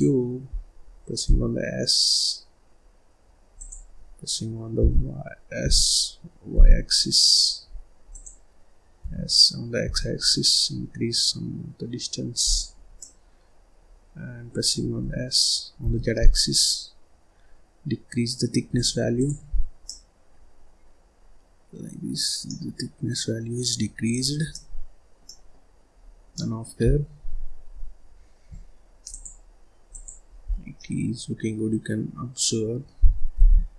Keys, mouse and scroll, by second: 0.4-1.2 scroll down 1, 1.2 s, 4.7 y, 5.5 s, 8.9 s, 12.9-14.9 middle drag, 14.9 s, 19.0 click, 19.4-19.8 scroll up 1, 19.8-22.2 middle drag, 22.2 scroll down 1, 22.3-24.0 middle drag, 24.0-24.4 scroll down 1, 24.4-25.6 middle drag, 25.6-26.2 scroll up 2, 26.2 middle click, 26.8-27.1 scroll down 1, 27.1-27.6 scroll up 1, 27.6-28.0 scroll down 1, 28.0-29.0 scroll up 2, 29.0-30.4 drag, 30.4-30.7 scroll down 1, 30.7-33.3 middle drag, 33.3 ctrl+s.